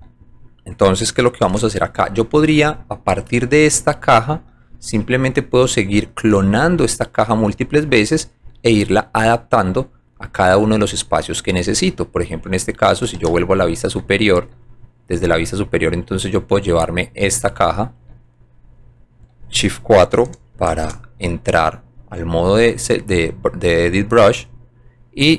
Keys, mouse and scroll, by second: 2.2 alt+middle click, 4.8 alt+middle click, 6.6-8.4 alt+drag, 9.2-10.8 alt+drag, 11.7 alt+click, 13.1 alt+j, 14.0 middle click, 14.6 alt+right click, 15.9 alt+click, 18.2-18.7 alt+right drag, 18.9 alt+right click, 21.9-22.2 shift+drag, 23.3-24.9 drag.